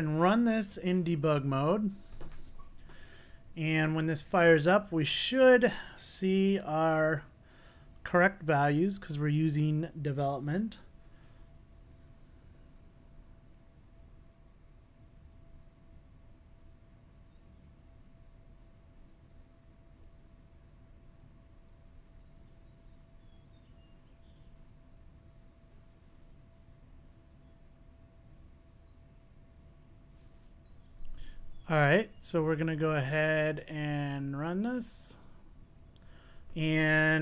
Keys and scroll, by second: 1.2 ctrl+d.